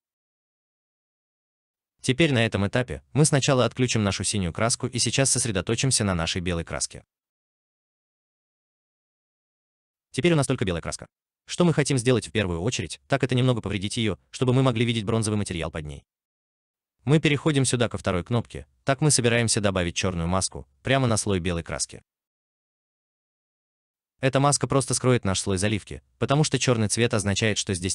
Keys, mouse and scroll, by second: 11.8 alt+right click, 12.5 alt+click, 13.7 alt+middle click, 23.7 alt+right click.